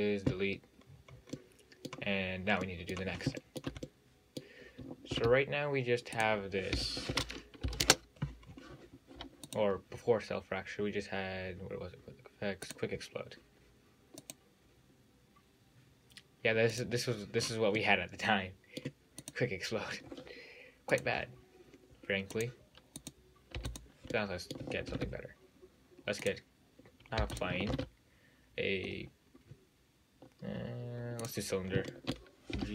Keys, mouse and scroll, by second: 1.1-1.4 scroll down 5, 1.4 scroll up 4, 1.6-3.4 middle drag, 3.4 scroll up 4, 3.7-5.3 shift+middle drag, 5.3 shift+a, 7.0 g, 8.7-9.7 scroll down 7, 9.7-12.7 drag, 14.4 click, 17.0 click, 17.6-18.0 scroll up 5, 18.0-19.5 middle drag, 19.5 click, 21.1 drag, 22.6-23.3 drag, 23.8 x, 24.4 middle click, 25.1 shift+a, 27.4 x, 27.9 shift+a, 31.9 scroll up 1, 32.1 shift+middle click.